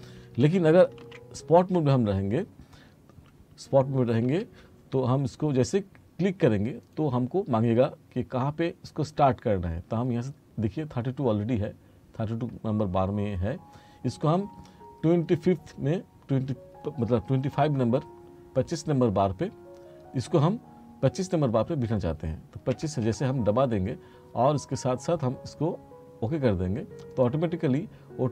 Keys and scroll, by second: 1.1 ctrl+z, 4.3 F3, 22.8 2.